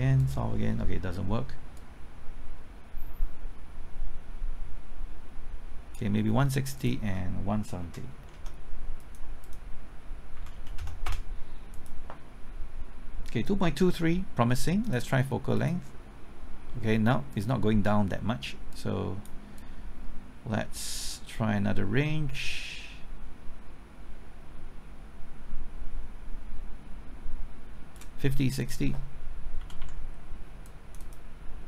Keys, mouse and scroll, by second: 1.4-7.8 drag, 3.8 KP_Enter, 7.8 KP_1, 8.1 KP_6, 8.3 KP_0, 9.0 click, 10.3 KP_1, 10.5 KP_7, 10.7 KP_0, 11.0 Return, 11.7-28.6 drag, 20.8 KP_Enter, 29.6 KP_5, 29.8 KP_6, 30.6 click.